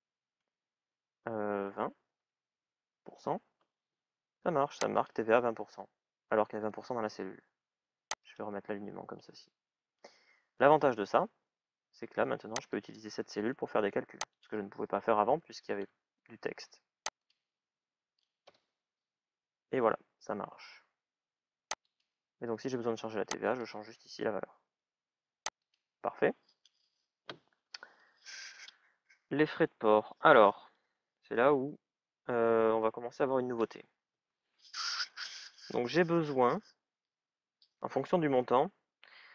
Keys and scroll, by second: 2.0 shift+à, 2.4 shift+ù, 2.9 Return, 15.0 BackSpace, 18.4 Return.